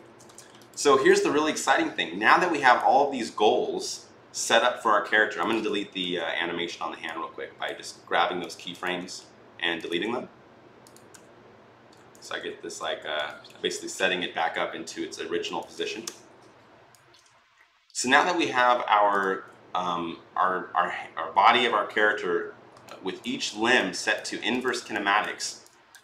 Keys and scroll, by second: 5.8 Delete, 8.8 Delete, 9.8 Delete, 12.2 Delete, 12.5 Delete, 15.8 Delete.